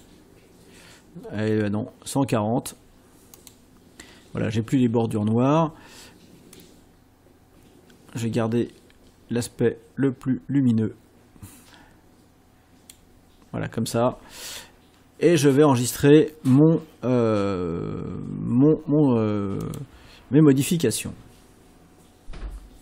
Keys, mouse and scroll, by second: 1.6 scroll up 1, 3.4 click, 6.6-13.1 drag, 19.7 click.